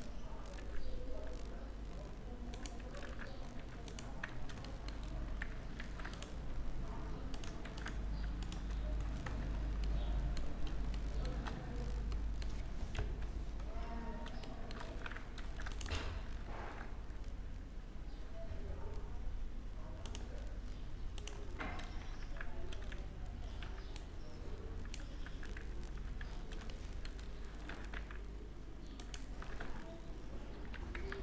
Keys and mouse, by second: 0.1 middle click, 0.2 e, 2.6 s, 3.9 middle click, 4.9-5.6 middle drag, 5.4 ctrl+r, 7.4 ctrl+r, 8.4 click, 8.8 drag, 9.0 Tab, 12.6 KP_3, 15.4 Tab, 15.4 ctrl+r, 16.2 ctrl+b, 20.8 click, 21.7 z, 21.8 z, 22.3 a, 23.2 b, 24.9 z, 25.7 z, 26.0 middle click, 26.4 middle click, 26.5 click, 26.8 middle click, 27.3 e, 29.1 s, 30.8 ctrl+z.